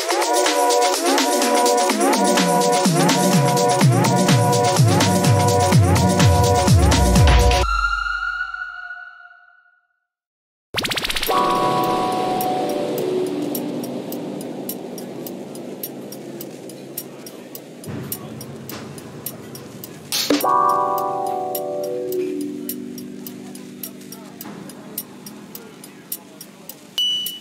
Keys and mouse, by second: 2.4 middle click, 3.6 ctrl+z, 4.5 middle click, 4.8 Tab, 5.4 Tab, 7.3 ctrl+r, 11.7 middle click, 13.1 ctrl+r, 16.8 ctrl+z, 17.1 ctrl+z, 17.7 middle click, 19.4 ctrl+r, 26.6 ctrl+r.